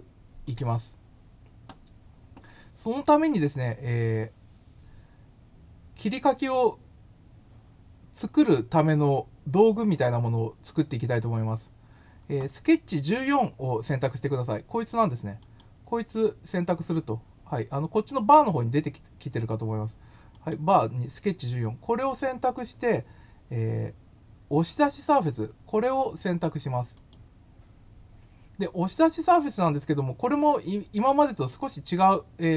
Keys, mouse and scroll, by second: 0.4 click, 15.3 click, 20.3 click, 26.9 click.